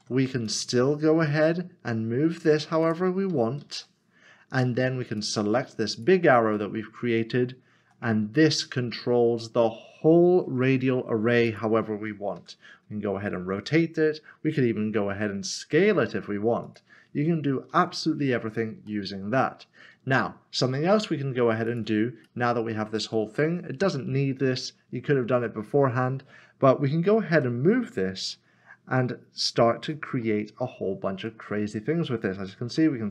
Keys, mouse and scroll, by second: 0.5 click, 1.3 typing, 2.8 click, 3.6 ctrl+z, 5.2 click, 6.6 middle click, 7.3 scroll down 1, 7.8 typing, 11.5 click, 13.8 typing, 15.1 typing, 16.6 click, 17.7 ctrl+z, 18.9 middle click, 21.7 click, 22.4 middle click, 27.3 g, 28.3 z, 29.7 click, 30.2 middle click, 30.8 scroll down 1, 31.3 middle click, 31.9 scroll up 1.